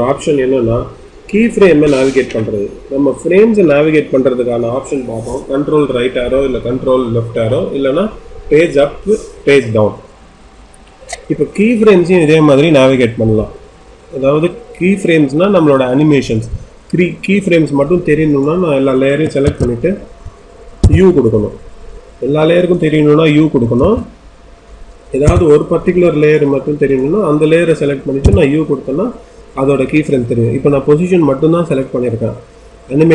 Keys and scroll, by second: 20.8 u, 25.2 u.